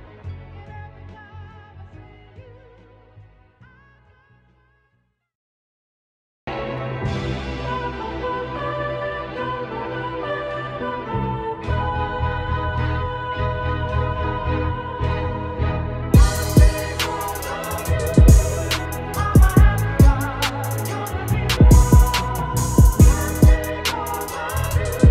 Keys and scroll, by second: 1.2 ctrl+z, 22.8 ctrl+shift+Return, 24.5 ctrl+t.